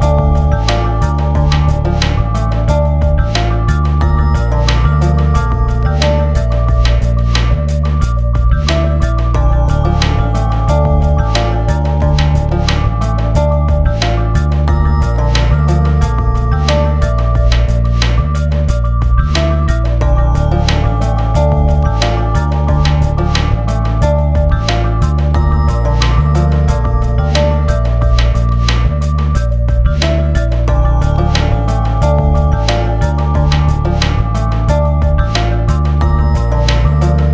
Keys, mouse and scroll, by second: 7.7 scroll down 1, 8.9-9.2 scroll down 1, 10.5 click, 11.6 typing, 13.0-15.7 typing, 19.7-20.4 typing, 19.9 click, 23.8 scroll down 1, 25.1 click, 26.3 right click, 27.1 click, 29.4 click, 30.4 Return, 31.5-33.1 drag, 33.1 F4, 34.6 click.